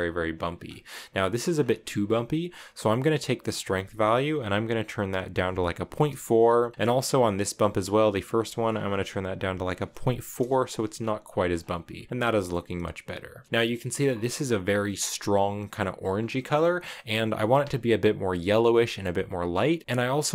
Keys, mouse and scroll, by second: 0.4-1.3 scroll up 3, 1.3 scroll down 1, 1.3-3.3 scroll up 3, 3.3-6.3 drag, 8.0-11.0 drag, 11.3 scroll up 1, 11.7-13.4 scroll down 4, 12.1 shift+middle click, 13.4-14.7 scroll up 1, 14.7-15.2 scroll up 1, 15.9 scroll down 5, 16.1-19.8 middle drag.